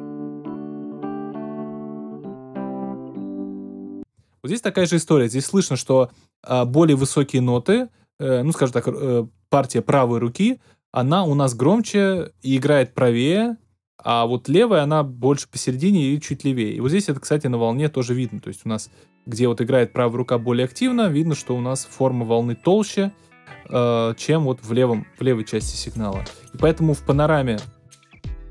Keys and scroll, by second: 3.9 space.